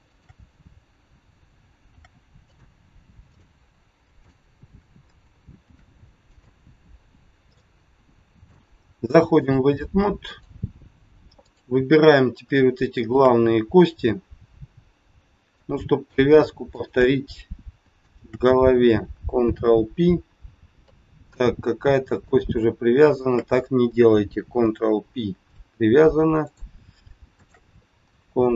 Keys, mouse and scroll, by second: 0.1 shift+click, 1.8 ctrl+shift+c, 3.2 click, 4.2 shift+click, 5.6 ctrl+shift+c, 7.1 scroll down 2, 7.6 middle click, 9.3 click, 11.5 click, 12.8 shift+click, 13.2 shift+click, 15.4 middle click, 16.7 shift+click, 17.9 shift+click, 19.4 ctrl+p, 21.2 click, 22.2 click, 23.2 shift+click, 23.3 shift+click, 24.4 ctrl+p, 26.4 click, 27.3 shift+click.